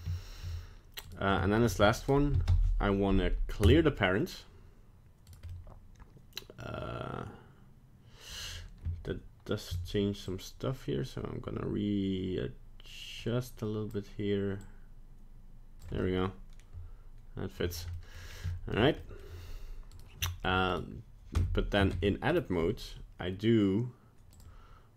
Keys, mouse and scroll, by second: 0.2 shift+middle click, 1.0 right click, 1.3 shift+middle click, 2.4 alt+p, 5.2 right click, 5.5 middle click, 10.2 shift+click, 14.6 shift+click, 16.0 middle click, 18.1 middle click, 18.1 scroll down 1, 18.5 shift+middle click, 18.9 middle click, 19.9 right click, 20.2 shift+middle click, 20.7 right click, 21.4 Tab, 22.0 Tab, 22.3 right click, 24.9 click.